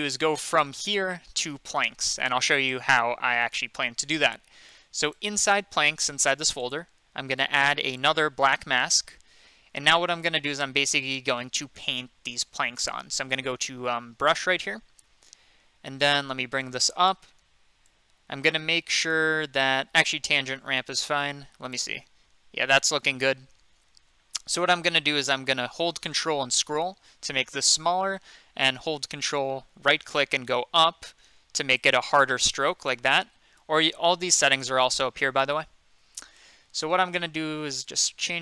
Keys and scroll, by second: 23.9 ctrl+z, 33.6 ctrl+z.